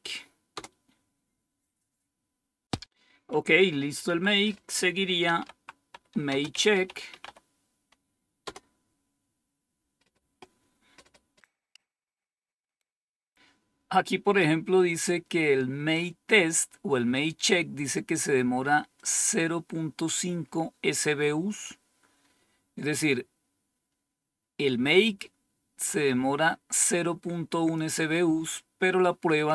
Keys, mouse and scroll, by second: 0.4 Return, 4.0 Down, 4.9-7.7 typing, 8.3 Return, 18.9-20.1 drag, 21.4-22.8 scroll up 2, 26.7-27.7 drag.